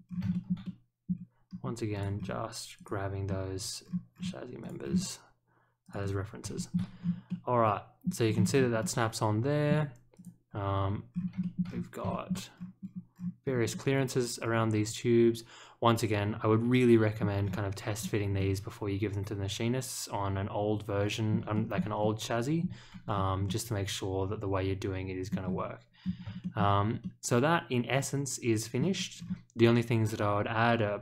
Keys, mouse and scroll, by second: 0.3 shift+middle click, 0.6 middle click, 1.4 middle click, 1.9 click, 2.1 scroll up 1, 2.7 click, 3.2 scroll up 1, 3.8-4.2 scroll down 2, 4.6 click, 4.8 scroll up 1, 5.8 click, 6.5 shift+middle click, 6.9 scroll up 1, 7.2-8.0 middle drag, 8.2-8.7 scroll down 2, 8.8-9.6 middle drag, 10.1 click, 11.1 scroll up 1, 11.4 shift+middle click, 11.6 scroll up 1, 12.0 shift+middle click, 13.5 middle click, 13.7-16.0 middle drag, 16.2 middle click, 17.4-18.3 scroll up 2, 18.3-21.3 middle drag, 21.5 shift+middle click, 22.0 middle click, 23.0 scroll down 1, 23.4-25.3 middle drag, 25.4 scroll up 1, 26.0 scroll up 2, 26.4 shift+middle click, 27.0-28.7 middle drag, 29.1 scroll down 2.